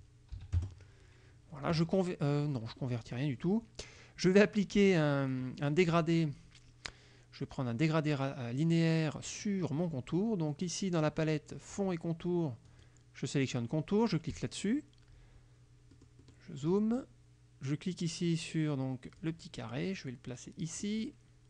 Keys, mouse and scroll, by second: 0.4 KP_5, 0.7 KP_Enter, 4.9 click, 12.8 click, 14.4 click, 16.0 click, 19.3-21.1 drag, 21.2 middle click.